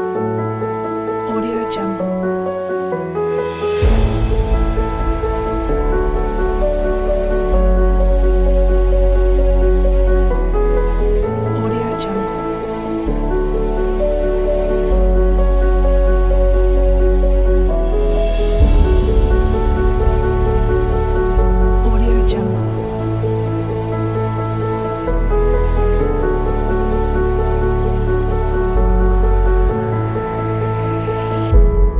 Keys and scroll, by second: 4.0 s, 17.3 space.